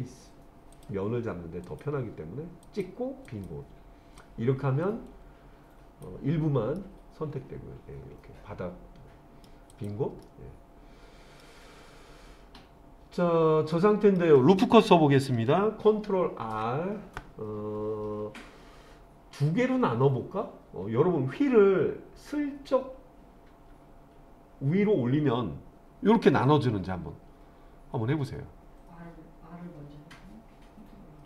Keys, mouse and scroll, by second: 0.0 click, 0.8 click, 1.7 click, 2.7 click, 3.3 click, 4.2-6.1 drag, 6.8-9.5 middle drag, 9.7 click, 10.3-11.5 middle drag, 13.7 middle click, 16.5 ctrl+r.